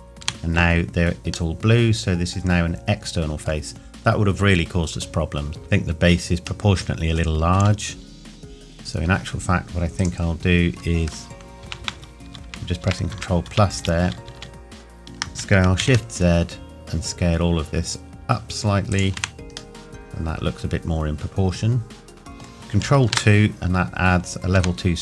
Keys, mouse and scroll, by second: 0.2 Tab, 1.5 middle click, 5.5 Tab, 6.6 middle click, 10.0 alt+click, 11.6 ctrl+KP_Add, 15.8 shift+z, 18.9 click, 19.1 Tab, 19.8 middle click.